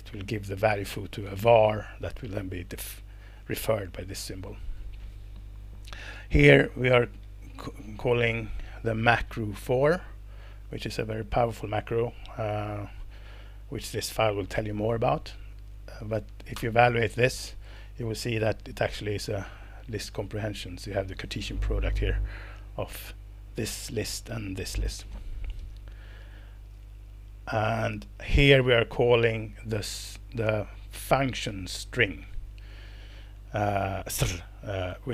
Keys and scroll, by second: 16.5 alt+Return, 26.0 Escape, 33.8 Right, 34.0 Right, 34.3 Right, 34.9 Left.